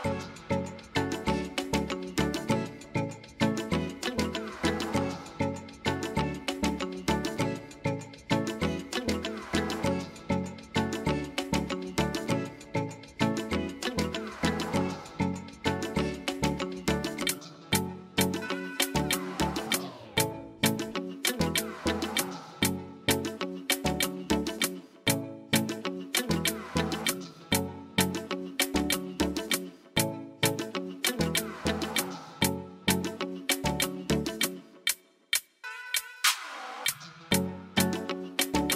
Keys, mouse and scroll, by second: 0.6 click, 2.0 click, 4.1 click, 4.6 click, 5.4 shift+click, 6.4 u, 9.1 click, 12.3-13.6 drag, 16.4 click, 18.8 click, 19.6-27.1 drag, 29.1 click, 32.5 click, 34.2 click, 35.2 click, 36.2 click, 38.7 click.